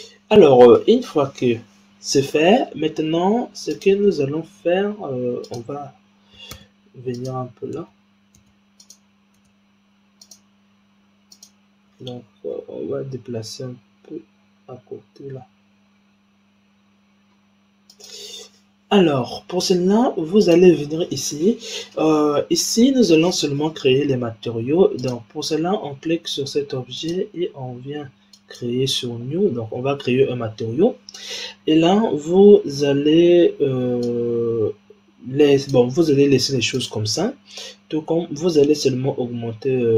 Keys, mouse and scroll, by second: 0.7-2.6 middle drag, 2.6-3.6 scroll down 2, 3.6 click, 4.5-5.4 scroll up 3, 5.4 click, 6.4 Tab, 7.0 click, 7.7 Tab, 8.3 Tab, 8.7 click, 9.3 Tab, 10.1 click, 11.2 click, 12.5 g, 18.4-20.4 scroll down 1, 20.4 click, 24.9 click, 26.9 click, 27.3-28.2 scroll down 3, 28.2-30.5 drag, 30.5-31.5 scroll down 1, 31.5-33.9 scroll down 6, 33.9-36.8 drag, 38.7-39.9 drag.